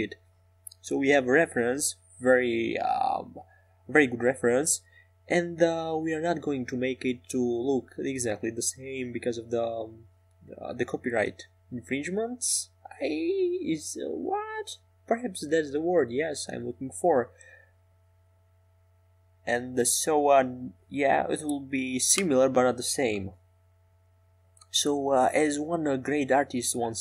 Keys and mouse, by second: 0.7 s, 7.5 KP_5, 9.1-10.1 middle drag.